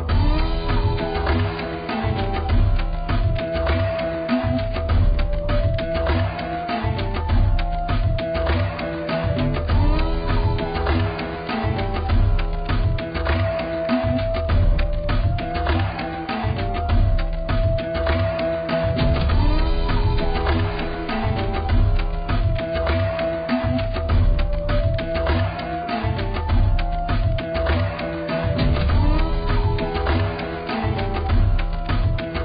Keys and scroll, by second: 0.7 ctrl+t.